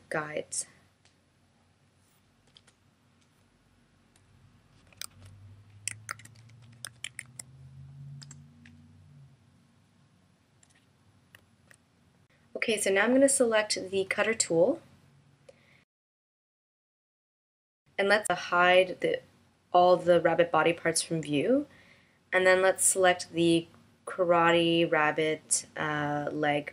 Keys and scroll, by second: 3.8 BackSpace.